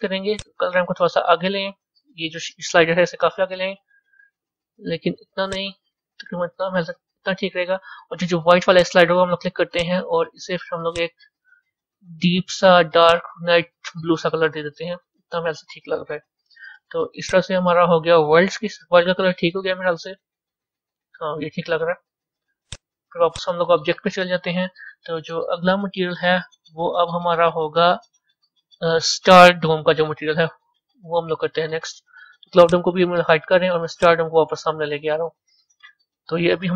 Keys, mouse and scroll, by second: 0.3-3.2 drag, 5.6-10.9 drag, 19.7-30.3 middle drag, 32.6 click, 33.9 click, 35.2-36.7 middle drag.